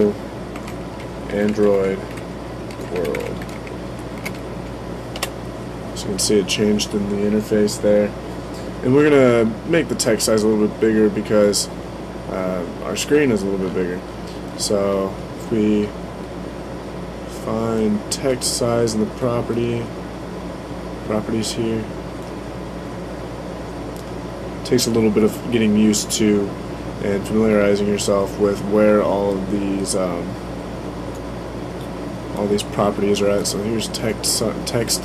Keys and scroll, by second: 0.0-3.6 typing.